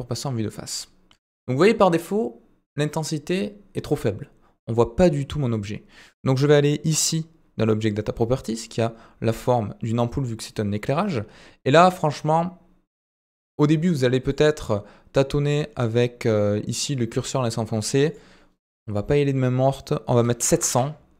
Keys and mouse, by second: 11.9-14.4 drag, 15.1-18.0 drag, 18.1-21.1 drag.